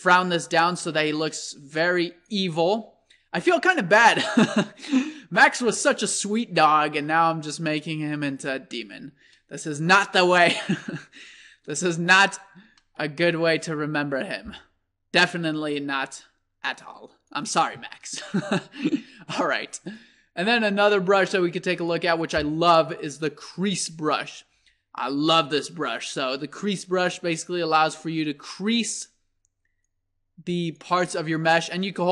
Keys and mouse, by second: 2.8-4.4 middle drag, 6.2-11.2 middle drag, 12.8-15.5 middle drag, 15.5 click, 19.9-21.5 drag, 22.9-28.2 drag, 24.5 f, 29.9-31.4 drag, 32.0-32.1 drag.